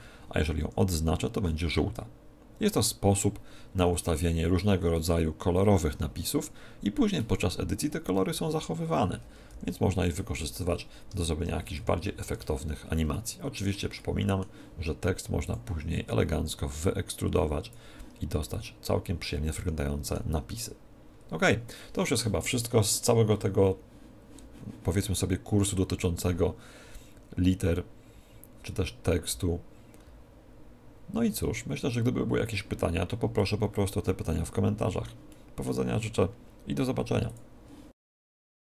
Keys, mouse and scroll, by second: 0.5 Right, 1.0 Right, 1.3 Right, 8.1 Left, 8.3 Left, 9.5 k, 9.6 k, 11.1 BackSpace, 11.3 BackSpace, 11.8 Escape, 12.3 Tab, 13.1-15.6 middle drag, 15.4-18.7 drag, 18.3-20.1 middle drag, 33.3-38.7 middle drag.